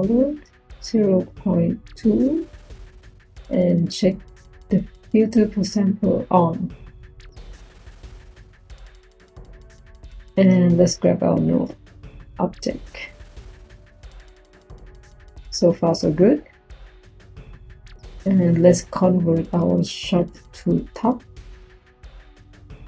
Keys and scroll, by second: 0.2 0, 1.0 ., 1.7 2, 10.5 Tab, 11.1 n, 11.4 u, 19.9 Tab.